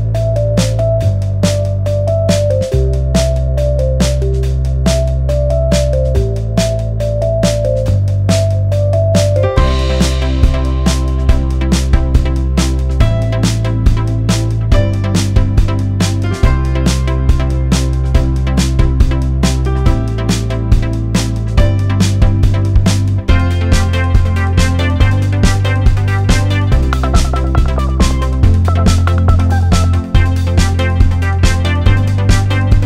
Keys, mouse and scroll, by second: 2.9-3.3 alt+scroll down 1, 3.3-3.7 alt+scroll up 1, 4.2 click, 6.3 Delete, 7.0-7.3 alt+scroll down 1, 7.4 alt+scroll up 1, 7.8 click, 8.6 alt+click, 10.5 alt+click, 11.2 click, 12.0 shift+Down, 12.7 shift+Down, 13.1 shift+Up, 13.9 click, 14.9 click, 16.0 alt+click, 16.7 alt+click, 17.1 alt+scroll down 1, 17.3 click, 17.8 right click, 18.2 click, 27.4 right click, 28.4 click, 29.8 click, 30.8 alt+scroll up 1.